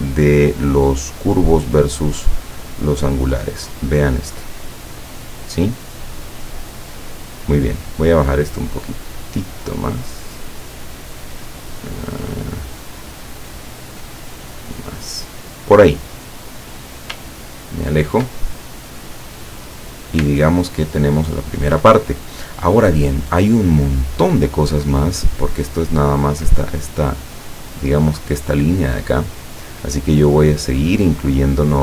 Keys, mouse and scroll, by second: 3.8-7.2 drag, 8.2-10.8 drag, 11.5-13.9 drag, 14.2-15.8 drag, 17.4 ctrl+scroll down 2, 17.9 ctrl+scroll down 2, 18.6-19.9 ctrl+drag, 20.4-21.5 ctrl+drag, 31.5 click.